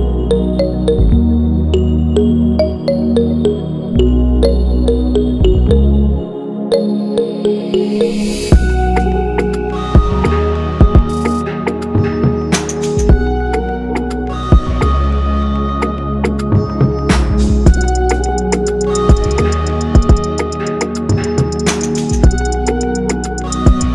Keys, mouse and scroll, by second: 5.8-6.2 ctrl+=, 6.8-8.3 scroll down 1, 12.1-13.7 scroll up 1, 18.9 ctrl+0, 20.2-20.7 scroll up 1, 20.7 scroll down 1, 23.7 shift+click.